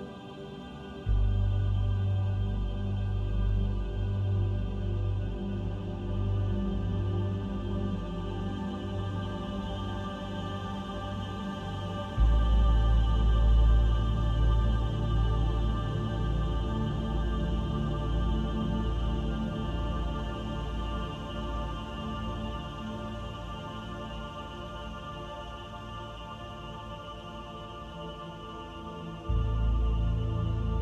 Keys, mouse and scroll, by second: 0.1 shift+middle click, 0.7 middle click, 1.5 middle click, 2.1 scroll up 2, 3.0 shift+click, 3.3 shift+click, 4.4 shift+click, 4.7 shift+click, 5.2 shift+click, 5.5 middle click, 6.5-7.0 scroll down 1, 7.0 s, 10.1 middle click, 10.8 scroll down 2, 11.1 Tab, 12.0 right click, 13.1 middle click, 14.4 click, 15.2 click, 18.8 click, 24.1 click, 24.8 click.